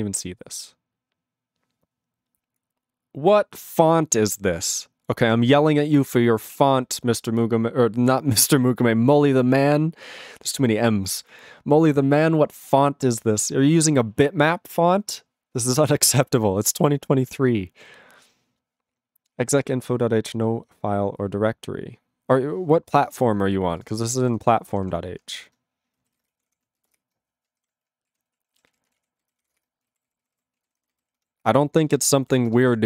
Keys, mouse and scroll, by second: 23.8 ctrl+s, 25.5 ctrl+Return, 27.0 ctrl+Return, 27.6 alt+<, 28.0-29.9 typing, 30.0 ctrl+=, 30.5 ctrl+a, 30.6 ctrl+n, 30.8 ctrl+n, 30.9 ctrl+n, 31.2 ctrl+-, 31.7 ctrl+n, 32.4 ctrl+n.